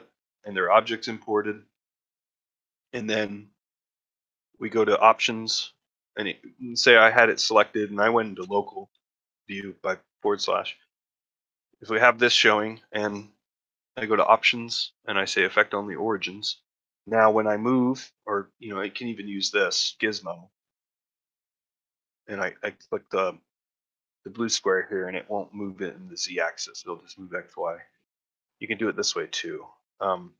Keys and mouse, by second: 6.9 click, 8.3 KP_Divide, 10.6-11.1 ctrl+shift+middle drag, 11.2 middle drag, 11.4 middle drag, 14.1-16.0 drag, 24.1-27.7 drag, 28.9 click.